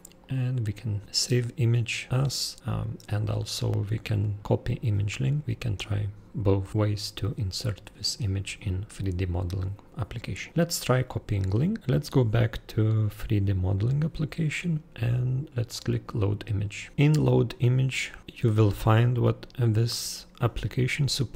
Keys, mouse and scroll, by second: 0.2 super+right click, 11.8 super+click, 13.4 super+click, 16.9 super+scroll, 17.4-17.9 super+scroll down 1.